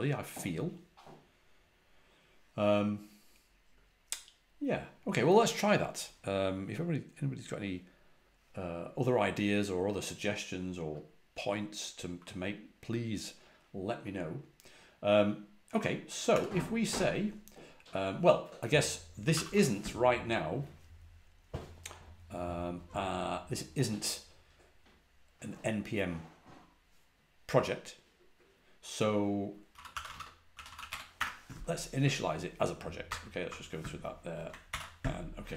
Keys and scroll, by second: 16.2 typing, 18.8-19.7 typing, 29.4-31.3 typing, 33.0-33.4 typing, 34.6 ctrl+l.